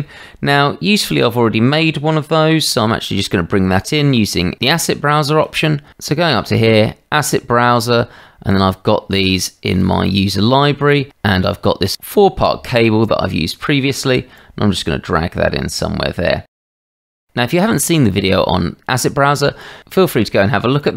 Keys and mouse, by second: 3.9-5.4 drag, 5.9-7.4 drag, 8.6-10.0 drag, 13.3-13.8 middle drag, 14.3-15.8 drag, 16.5 middle click, 16.6 shift+middle click, 17.0 click, 17.0 right click, 20.8-20.9 drag.